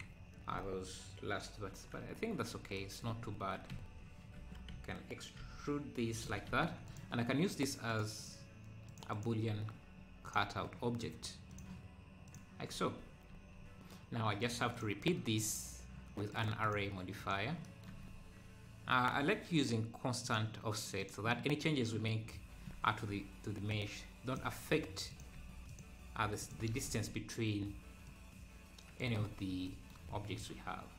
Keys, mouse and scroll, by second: 2.0 Tab, 3.1 Tab, 3.4 Tab, 4.2 scroll down 2, 4.4 Tab, 4.7 a, 5.4 e, 6.3 Tab, 6.9-12.7 drag, 14.4-17.6 drag, 20.2-29.5 drag, 29.5 scroll down 1, 30.0 `.